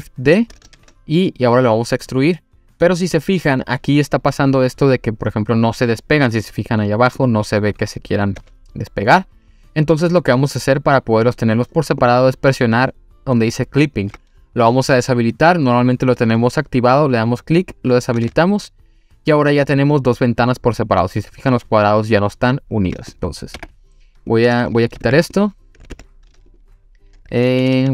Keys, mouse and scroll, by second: 0.8 shift+d, 3.7-4.2 scroll down 2, 7.1 click, 7.4-8.4 scroll down 1, 8.4 scroll down 1, 8.4 s, 11.4 click, 17.2 click, 17.9 click, 18.2 s, 23.1 click, 23.5 Delete, 25.0 Tab, 25.3 click, 25.9 Tab, 26.5 click, 27.6 ctrl+z, 27.8 ctrl+z.